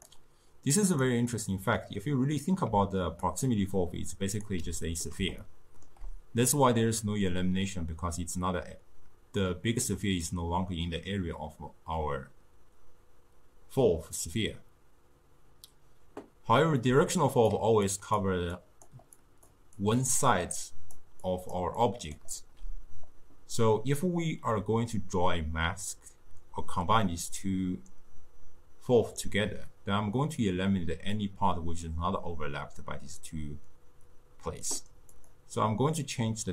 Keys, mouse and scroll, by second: 0.0 click, 0.9 click, 1.4-2.8 drag, 2.8 d, 3.3 d, 3.4-4.5 drag, 4.5 d, 4.6 d, 5.5-8.5 shift+middle drag, 16.9-22.5 typing, 17.2 click, 18.0 click, 18.6 click, 19.2 click, 19.9 click, 20.7 click, 21.3 click, 21.9 click, 35.2-36.5 drag.